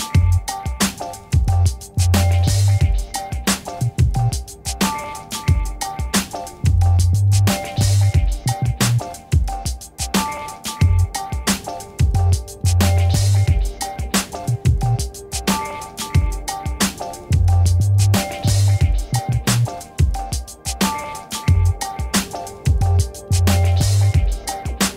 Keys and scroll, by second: 5.4 ctrl+Return, 14.6 alt+BackSpace.